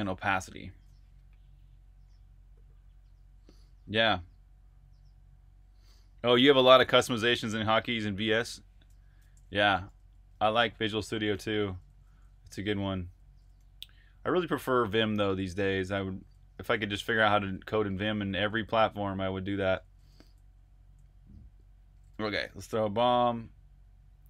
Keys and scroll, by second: 0.0-0.9 typing, 9.1-22.7 typing, 24.1-24.2 typing.